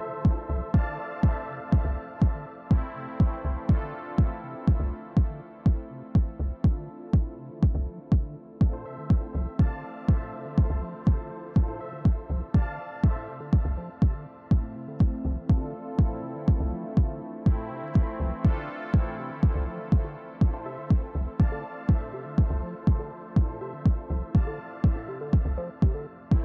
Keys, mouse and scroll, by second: 0.6 click, 4.0-5.2 drag, 4.6-5.9 scroll up 2, 5.9-7.5 scroll down 3, 7.5-8.4 scroll down 1, 8.4-11.2 scroll up 4, 11.2 scroll up 1, 11.4-11.9 scroll down 2, 11.9-12.4 scroll down 1, 13.1-14.4 drag, 15.3 click, 16.5 click, 17.3 click, 19.2-21.1 drag, 24.9 click, 25.6 click.